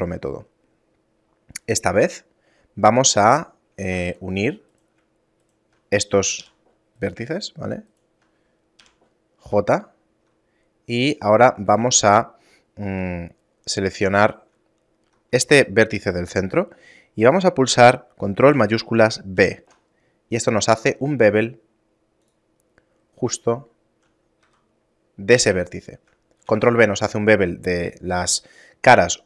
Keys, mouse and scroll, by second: 0.4 scroll up 2, 1.7 Tab, 3.6 ctrl+Tab, 4.4 right click, 5.1 shift+right click, 6.1 j, 6.6 right click, 7.6 shift+right click, 8.5 j, 11.4 right click, 12.6 a, 15.0 right click, 19.0 ctrl+shift+b, 23.2 shift+middle click, 24.1 e, 25.5 shift+middle click, 26.1 g.